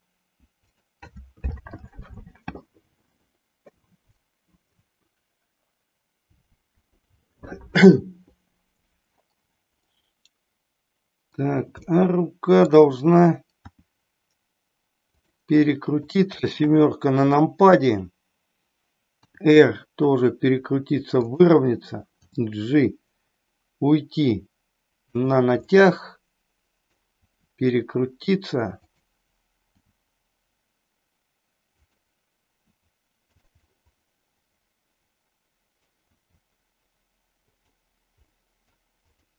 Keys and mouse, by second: 0.8 click, 9.9-11.4 middle drag, 11.8 middle click, 13.6 r, 15.5 middle click, 16.5 KP_7, 19.3 r, 21.1 click, 22.1 g, 25.1 click, 25.6-26.9 middle drag, 27.0 r, 29.8 g, 31.8 click, 32.5 r, 33.3 click, 33.5 middle click, 34.8-35.8 middle drag, 35.9 r, 37.5 click, 38.1 middle click.